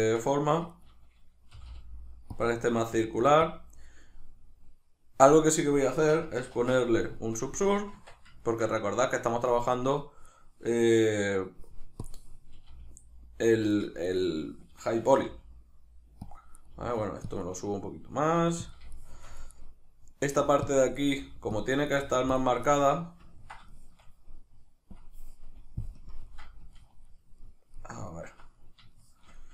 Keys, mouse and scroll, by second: 0.1-0.7 ctrl+middle drag, 0.5 1, 0.7 right click, 1.5 g, 2.4 click, 2.9 g, 3.5 click, 5.9 Tab, 6.5 ctrl+2, 7.6-10.2 shift+middle drag, 7.9 Tab, 10.2 right click, 12.0 click, 12.6 g, 14.0 shift+right click, 15.2 g, 16.3 click, 16.6 right click, 16.7 g, 17.4 click, 17.7-18.7 middle drag, 18.4 g, 18.7 click, 18.9-19.5 shift+middle drag, 19.5 right click, 20.4 g, 20.7 click, 21.0 right click, 21.1 g, 21.6 click, 21.9 right click, 22.1 g, 22.4 click, 22.7-24.9 middle drag, 24.9-26.0 drag, 26.0 KP_Decimal, 26.3-29.5 middle drag.